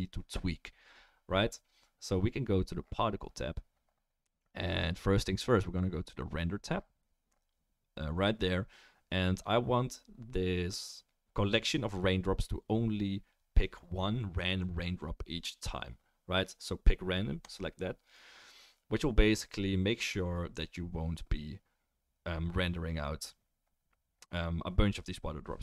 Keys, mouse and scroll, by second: 25.5-25.6 middle drag.